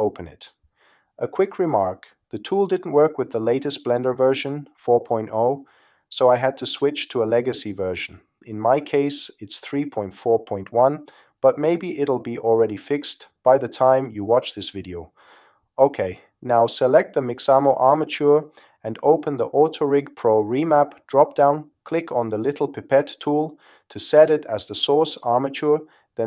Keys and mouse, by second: 23.8 click.